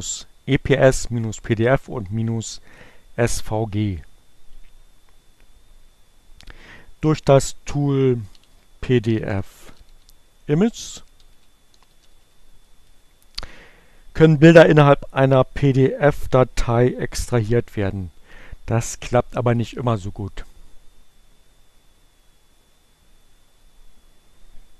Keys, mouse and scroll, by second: 9.7-14.8 typing, 15.1 Return.